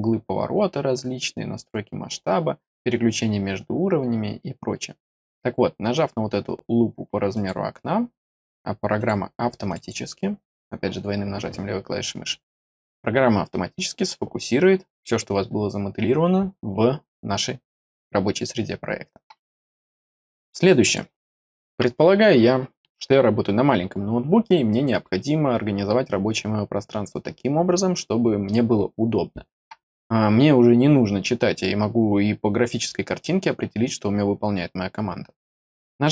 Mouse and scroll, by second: 7.3 click, 8.9 click, 9.6 click, 9.8 click, 20.0 click, 20.8 click.